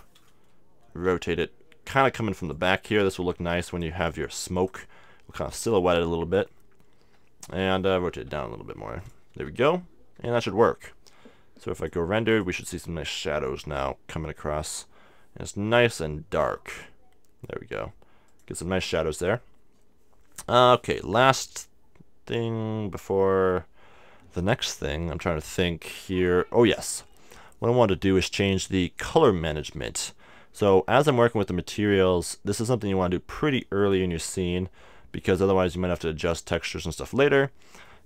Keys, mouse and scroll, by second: 1.0 r, 2.6-4.2 drag, 3.0 g, 4.0 r, 5.6 click, 6.3-7.4 middle drag, 7.0 KP_1, 8.1 r, 9.1-10.8 drag, 9.3 KP_3, 10.1 KP_0, 11.8-13.5 drag, 15.7 r, 18.4-20.3 drag, 25.1-28.1 middle drag, 28.1-29.9 drag, 33.8-35.6 drag.